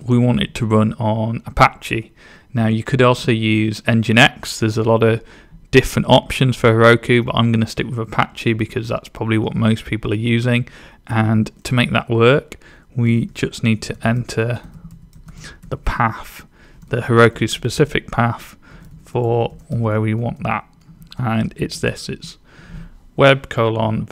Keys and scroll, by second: 13.1-15.6 typing, 16.7-19.8 typing, 20.8-21.5 typing.